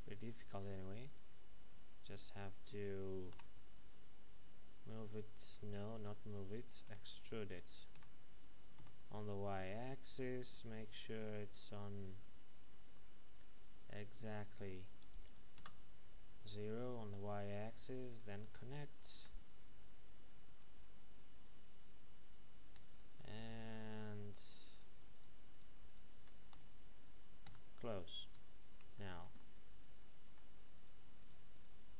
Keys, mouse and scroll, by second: 1.1 right click, 3.3 g, 5.9 Escape, 6.9 e, 7.9 x, 9.9 click, 10.7 n, 11.2-13.4 scroll up 1, 13.6 click, 15.6 KP_Enter, 18.1 right click, 18.7 shift+right click, 20.6 f, 23.1 ctrl+Tab, 23.6 click, 24.7 shift+right click, 26.5 f, 27.4 Tab, 29.3 shift+middle click, 30.7 right click, 31.2 shift+right click.